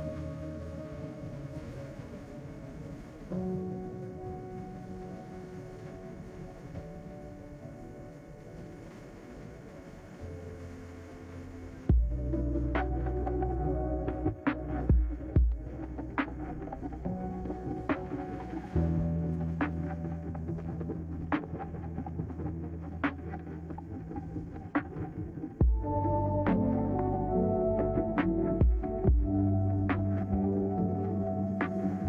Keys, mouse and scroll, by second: 0.2 click, 1.5-2.5 typing, 4.5 Return, 8.0 click, 8.1 click, 8.9 9, 9.2 6, 9.6 Return, 17.0 click, 17.5 click, 19.9 click, 20.5-21.5 typing, 23.9 click, 24.0 click, 24.7 9, 25.0 6, 25.2 Return, 27.7 click, 27.8 click, 28.5 9, 28.8 6, 29.0 Return.